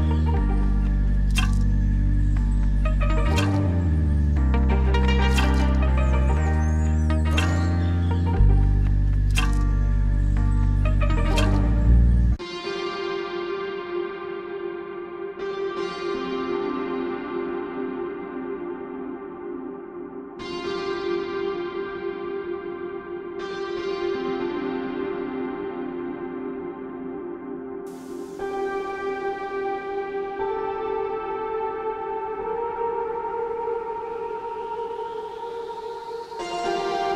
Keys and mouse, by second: 5.5 Tab, 6.4-7.4 middle drag, 7.8 right click, 8.0 right click, 8.4 middle click, 8.9 right click, 10.2-11.2 middle drag, 11.4 middle click, 12.6 shift+middle click, 14.2 shift+click, 17.1 ctrl+click, 17.7-20.3 shift+drag, 21.1 shift+click, 22.1 shift+click, 23.9 shift+middle click, 24.6 shift+middle click, 25.1 shift+middle click, 26.0-27.7 middle drag, 28.8-29.6 middle drag, 31.3 ctrl+z, 32.8 shift+middle click, 34.3-35.3 right drag, 35.3 middle click.